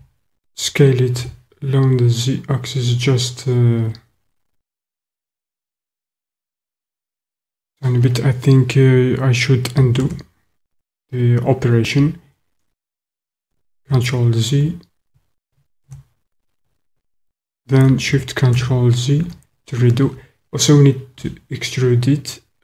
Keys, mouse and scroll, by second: 1.2 z, 6.7 click, 10.1 ctrl+z, 13.9 ctrl+z, 15.9 ctrl+z, 18.6 ctrl+shift+z, 21.2 e.